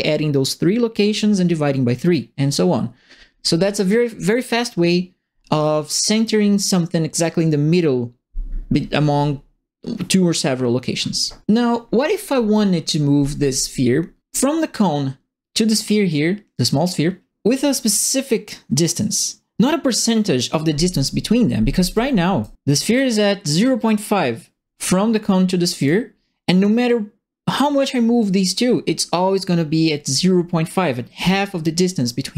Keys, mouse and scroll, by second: 21.9 right click, 22.8 click, 25.8 click, 26.8-32.3 drag.